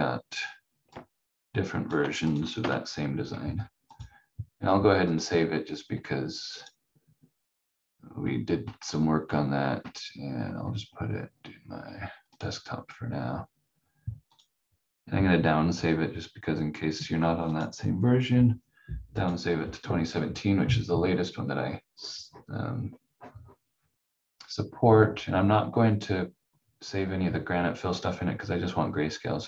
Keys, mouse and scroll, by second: 2.6 F4, 3.9 click, 17.4 click.